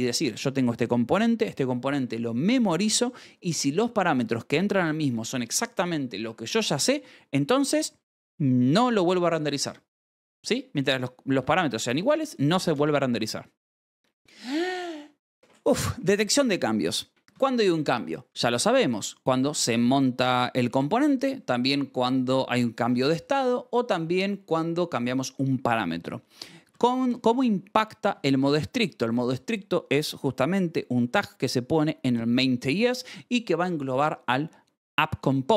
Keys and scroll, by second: 7.3 Escape, 8.3-9.1 typing, 9.9 Escape, 13.7 l, 16.0 k, 17.2 shift+v, 18.2 Escape, 19.0 j, 19.7 Escape, 21.1 k, 25.6 Escape, 26.3 j, 26.6 shift+v, 28.0 shift+v, 28.4 Escape.